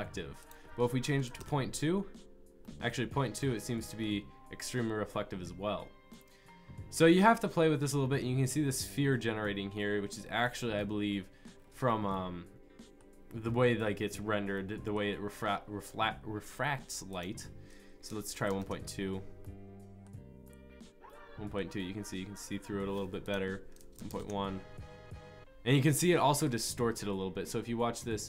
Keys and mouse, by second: 1.4-2.6 drag, 2.7-4.2 drag, 18.7 click.